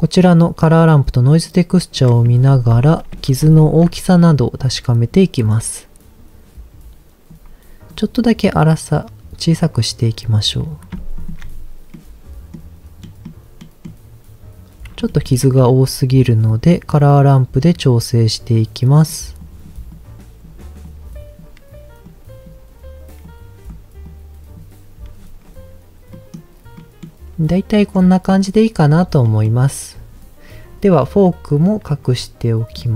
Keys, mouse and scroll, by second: 0.7 click, 1.4 click, 2.5 ctrl+z, 3.1 ctrl+z, 3.6 ctrl+shift+click, 4.3-7.3 drag, 7.9-10.3 drag, 11.2 ctrl+shift+click, 11.9 middle click, 13.0 middle click, 13.6 middle click, 15.1 shift+middle click, 16.5-18.2 drag, 18.5 click, 19.4 click, 19.9 click, 20.8 click, 22.1 click, 23.3 click, 24.1 click, 25.3-25.9 scroll down 1, 26.1 middle click, 26.7 middle click, 27.5 middle click, 28.3 middle click, 28.7-29.3 scroll down 2, 29.3 middle click, 32.0-32.7 scroll up 1, 32.7 click.